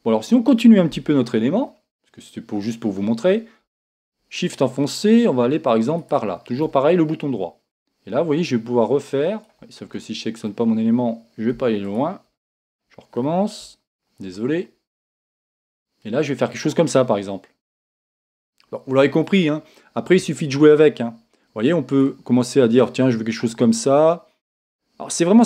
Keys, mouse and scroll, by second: 1.2 KP_1, 6.0-7.8 shift+right drag, 7.8-9.5 drag, 10.0-12.2 middle drag, 12.2 click, 13.6 KP_1, 15.9-19.0 drag, 20.6-22.1 drag, 22.8-25.4 drag.